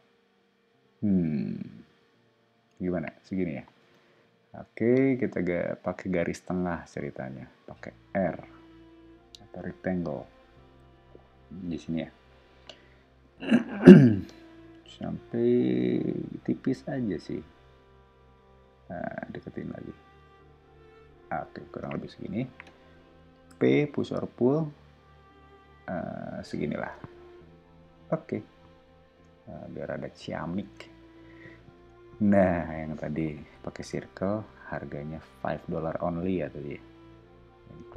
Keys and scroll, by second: 3.8 space, 8.1 r, 21.7 space, 23.5 p, 26.8 space, 27.6 o, 32.5 space, 33.8 c.